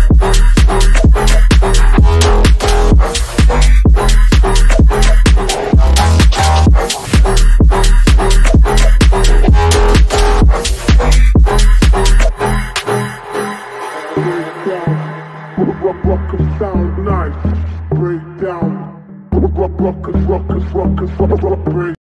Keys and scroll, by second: 2.7 F3, 5.4 F3, 5.9 shift+F2, 6.2 Escape, 12.8 shift+F2, 13.1 Escape, 13.8 d, 14.5 f, 15.2 ctrl+z, 16.2 f, 16.6 F3, 18.0 F9.